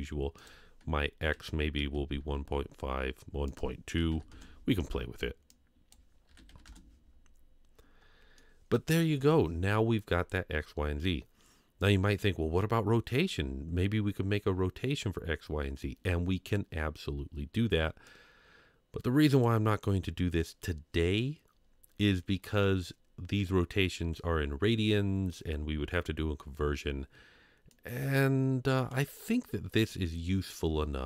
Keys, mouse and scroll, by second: 0.4-3.5 drag, 3.9 KP_1, 4.0 KP_Decimal, 4.1 KP_2, 4.3 KP_Enter, 8.0-8.3 scroll down 1, 8.3-9.0 middle drag, 18.1-19.4 drag, 27.7 click, 28.0 click.